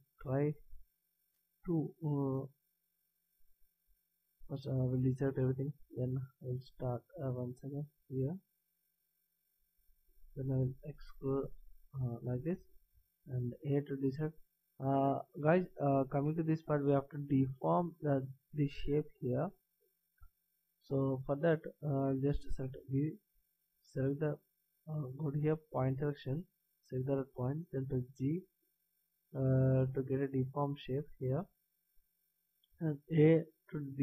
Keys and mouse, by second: 1.6 b, 3.9 a, 5.8 b, 9.0 b, 10.6 s, 12.9 a, 22.5 b, 25.9-27.6 drag, 27.9 g, 32.7 a.